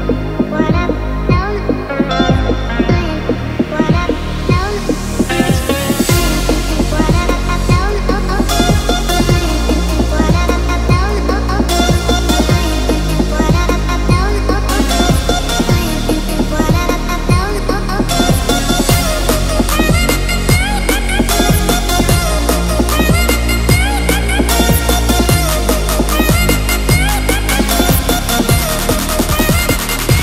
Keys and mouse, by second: 3.6 click, 5.5 alt+z, 6.1-6.7 middle drag, 7.3-7.8 middle drag, 7.8 click, 8.2 shift+middle drag, 8.6 middle click, 9.1 Tab, 10.7-12.5 drag, 12.8 Tab, 13.3-13.9 middle drag, 14.8 KP_1, 16.1 shift+middle click, 17.6 shift+middle click, 18.8 alt+z, 19.2 click, 20.4 g, 23.1 click, 24.3 g, 27.4 Tab, 27.9 alt+z, 28.9-29.3 drag, 29.5 Tab.